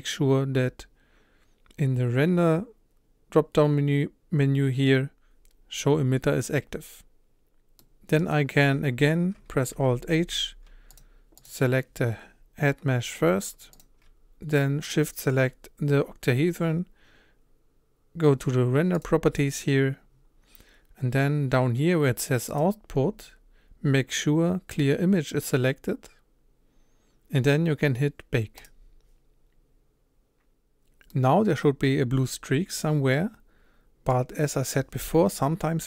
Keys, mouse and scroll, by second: 7.8-9.7 middle drag, 9.7 alt+h, 11.0 click, 11.5 click, 13.8 shift+click, 30.1 click, 31.1-34.8 middle drag.